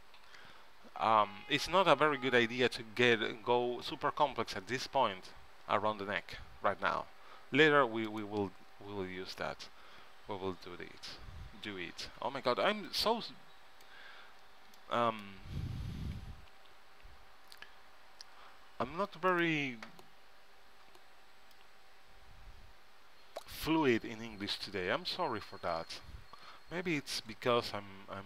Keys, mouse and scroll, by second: 8.3 middle click, 8.9 KP_3, 12.5 b, 14.4 b, 16.4 g, 21.7-23.5 drag, 24.6 g.